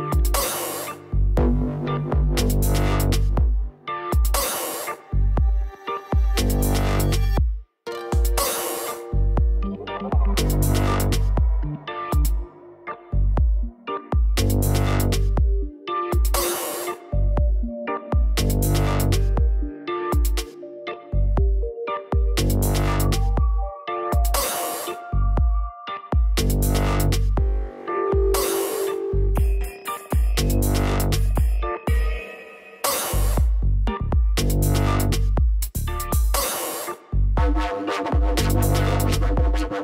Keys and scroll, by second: 1.5 BackSpace, 3.1-4.4 typing, 31.1 2, 31.4 Return, 34.7 4, 35.2 Return.